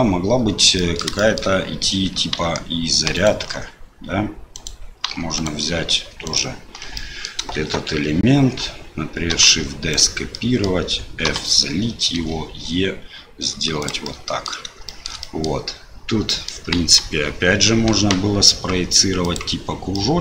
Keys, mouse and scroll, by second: 0.4 Tab, 0.7 click, 1.1 shift+middle click, 3.1 alt+click, 4.5 click, 5.3 alt+click, 6.2 alt+click, 6.9 middle click, 9.3 shift+d, 10.4 middle click, 11.3 f, 12.1 e, 14.1 middle click, 14.9 shift+middle click, 15.2 middle click, 16.3 middle click, 16.7 KP_1, 19.2 click, 19.9 middle click.